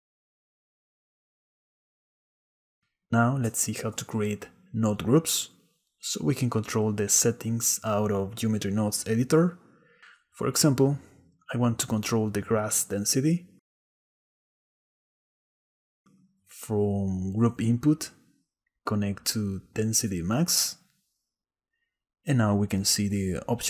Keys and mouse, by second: 1.0 shift+middle click, 4.6 click, 10.4 click, 14.2 click, 14.5-15.6 drag, 16.1 click, 17.7-21.8 drag.